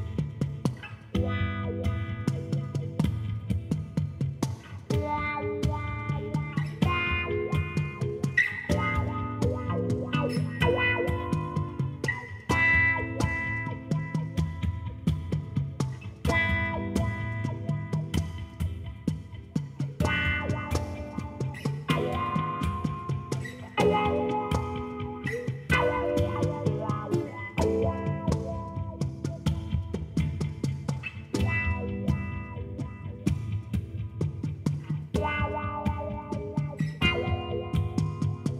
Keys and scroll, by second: 1.2 b, 4.4 shift+z, 7.1 s, 8.9 r, 10.1 Return, 11.4 ctrl+z, 12.1 r, 12.4 -, 12.5 9, 12.8 Return, 13.6 s, 14.5 g, 14.6 z, 16.9 s, 27.7 shift+d, 28.1 y, 30.1 g, 30.3 x, 36.6 shift+d, 36.8 y.